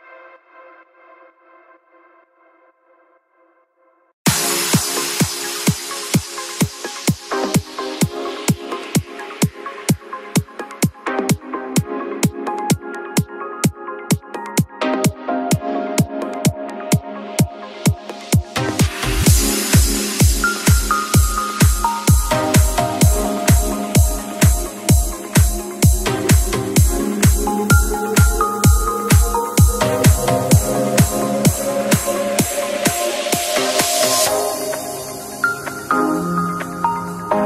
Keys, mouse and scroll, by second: 1.4-2.3 typing, 7.1 Escape, 8.8-9.8 drag, 12.7 KP_5, 13.4 click, 16.3-17.2 typing, 18.5 typing, 20.6 Escape, 22.1 click, 24.7 KP_1, 24.8 KP_0, 25.8 Return, 26.8 click, 28.4-29.1 typing, 36.4-37.4 drag.